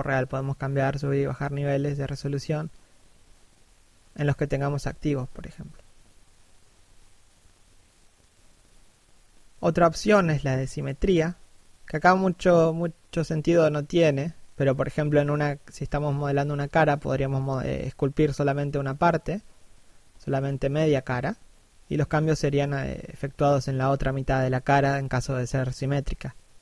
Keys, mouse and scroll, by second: 0.2 shift+middle click, 0.5 scroll up 1, 5.9 x, 6.6 middle click, 7.3 click, 8.1 scroll down 1, 8.3 middle click, 10.2 click, 11.0 middle click, 12.7 7, 16.6 click, 17.6 middle click, 18.7 middle click, 19.0 click, 20.1 middle click, 24.8 1, 25.6 middle click.